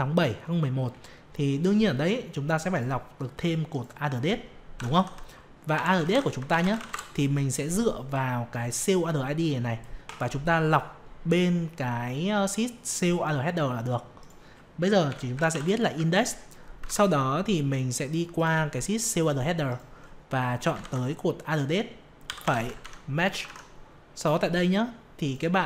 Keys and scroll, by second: 16.8 alt+Tab, 23.4 alt+Tab.